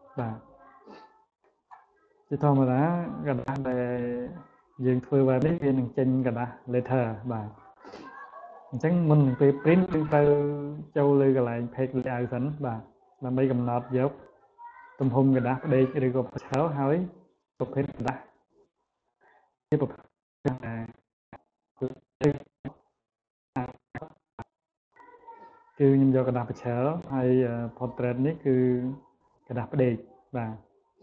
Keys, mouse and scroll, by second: 2.0-2.9 scroll down 2, 3.4 click, 4.0 click, 4.4 click, 5.0 click, 5.4 click, 5.9 click, 6.5 click, 7.1 click, 7.5 click, 8.1 click, 8.5 click, 9.3 click, 11.7 click, 13.7 click, 16.3 click, 18.6-19.5 drag, 20.7-21.3 drag, 23.8 click.